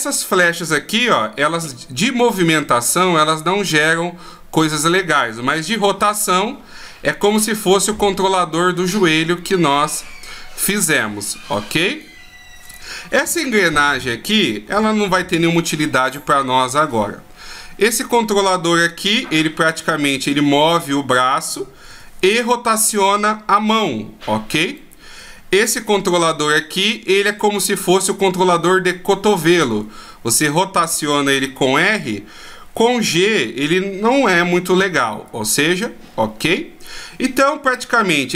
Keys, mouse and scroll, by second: 1.4 g, 12.8 right click, 13.6 g, 16.2 middle click, 17.9 right click, 24.8 right click, 26.1 r, 36.0 middle click, 38.2 right click.